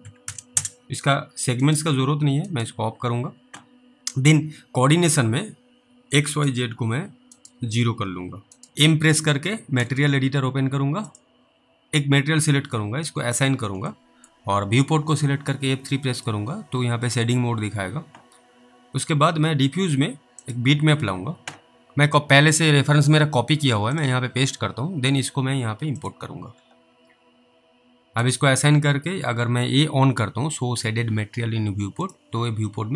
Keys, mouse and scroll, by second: 0.0-0.8 typing, 0.8-1.2 scroll down 1, 1.7 right click, 6.3 right click, 8.7 click, 9.8 m, 11.1 click, 14.5 middle click, 15.7 F3, 16.5 middle click, 20.5 click, 21.8 right click, 23.9 click, 32.0 click.